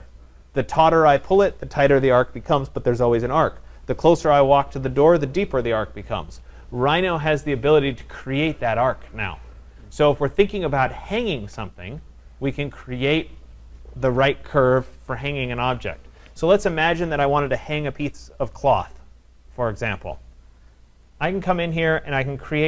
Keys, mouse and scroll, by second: 20.9 click, 21.1 click, 21.8 middle click, 21.9 middle click.